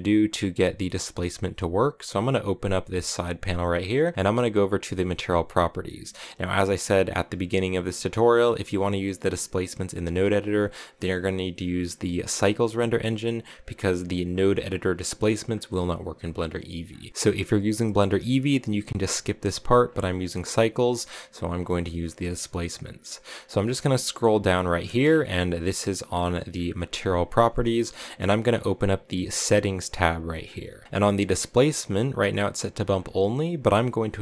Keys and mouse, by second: 1.4-3.1 drag, 5.1 click, 14.3-16.9 drag, 17.1 ctrl+w, 19.7 click, 29.8 click, 33.0-34.2 drag.